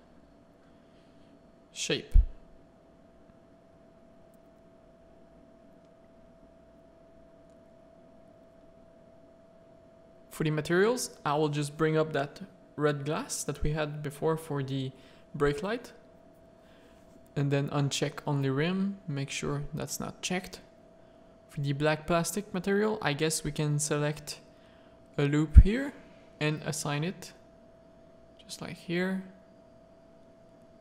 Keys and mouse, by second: 0.3 middle click, 1.8-2.6 middle drag, 4.2 middle click, 4.3 click, 4.7 middle click, 5.4 z, 5.6 middle click, 6.0 Tab, 6.5 1, 8.0 click, 9.4 click, 14.4 z, 14.9 shift+middle click, 16.2 click, 21.9 z, 22.1 a, 22.2 middle click, 22.7 3, 23.0 1, 23.5 ctrl+r, 24.2 3, 25.0 z, 25.9 middle click, 28.0 Tab, 28.2 click, 28.6 alt+a, 29.3 z.